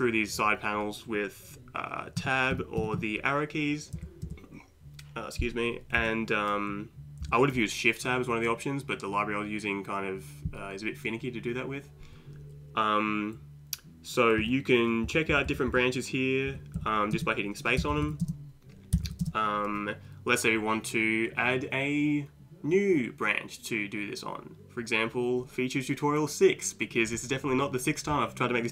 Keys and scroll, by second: 2.2 Tab, 2.5 Tab, 2.8 Tab, 3.0 Tab, 4.0 Left, 6.0 Left, 7.2 Left, 14.4 Right, 15.1 Down, 15.7 Down, 16.5 Up, 16.8 Down, 17.2 space, 17.8 Down, 18.0 Down, 18.0 Down, 18.9 Down, 19.1 Down, 19.2 space.